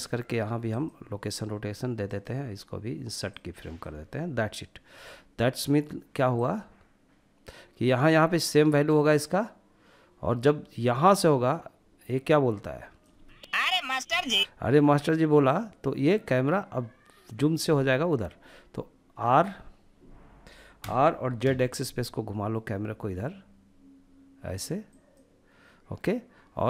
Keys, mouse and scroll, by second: 1.3-4.3 right drag, 5.7-12.3 drag, 12.3 space, 13.4 space, 14.7-17.7 drag, 17.7-20.1 middle drag, 20.1 r, 20.7 z, 24.1-26.6 drag.